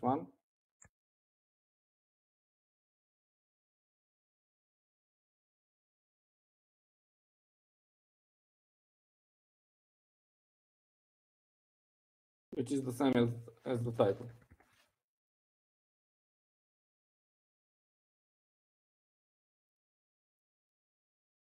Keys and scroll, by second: 0.0-5.0 typing, 15.4 shift+Escape, 15.5-19.4 typing.